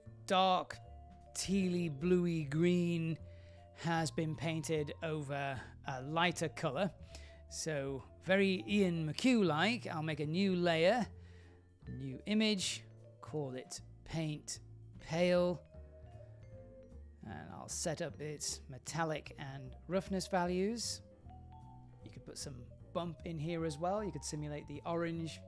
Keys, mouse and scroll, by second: 3.1 click, 6.2 click, 7.7 click, 8.6 click, 11.4 click, 12.0 click, 12.9-18.5 drag, 19.9 click, 20.3-21.2 scroll down 1, 21.2 click, 22.0-24.2 drag, 24.2 typing, 24.9 click.